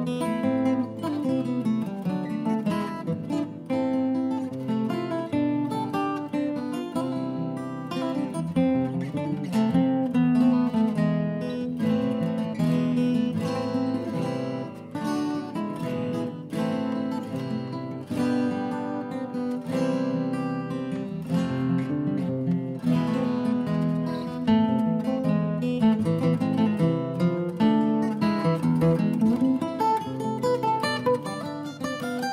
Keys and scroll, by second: 10.5-11.7 typing.